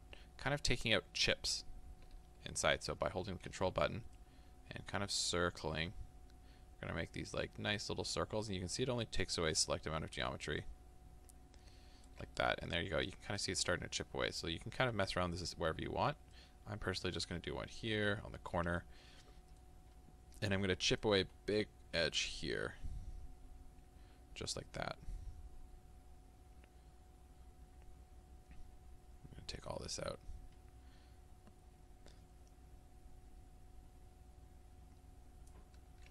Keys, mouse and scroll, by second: 0.8-3.3 scroll up 1, 4.4-12.5 ctrl+drag, 12.5-16.5 middle drag, 14.8-15.2 scroll down 2, 15.2-15.8 scroll up 2, 15.8-16.5 scroll up 1, 16.5-18.8 ctrl+drag, 18.8-21.2 middle drag, 21.2-36.1 ctrl+drag.